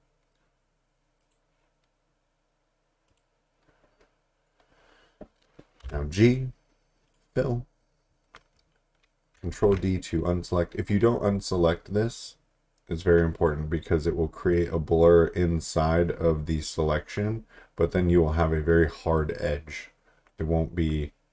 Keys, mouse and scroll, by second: 1.2 click, 5.8 g, 7.1 click, 9.6 d.